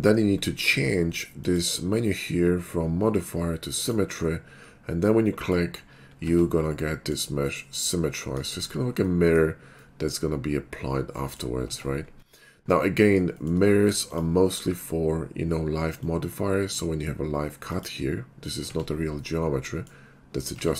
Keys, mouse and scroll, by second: 1.4 click, 1.9 alt+x, 3.8 click, 5.4 click, 6.3 Tab, 6.9 middle click, 7.2 middle click, 8.5 shift+middle click, 9.0 middle click, 9.9 middle click, 11.2 middle click, 11.6 Tab, 14.0 click, 14.6 alt+w, 16.0-16.7 drag, 17.7 click, 18.5 click, 18.8 Tab, 19.1 middle click, 20.5 Tab.